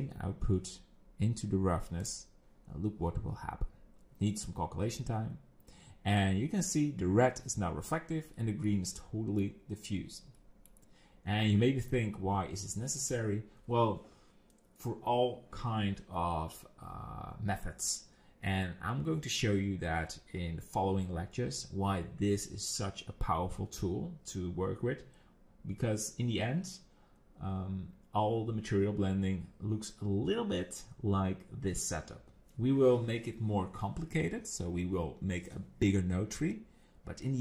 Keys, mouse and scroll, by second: 8.7 middle click, 10.4 middle click, 12.2 middle click.